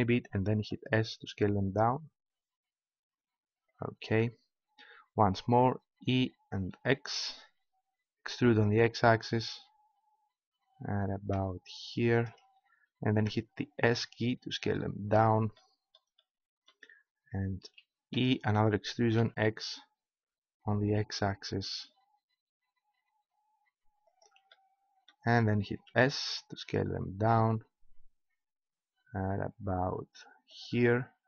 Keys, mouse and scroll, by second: 0.6 s, 3.8-6.0 drag, 6.0 e, 12.5 click, 13.1 s, 15.1 click, 18.1 e, 24.2-25.9 drag, 25.9 s, 30.6 click.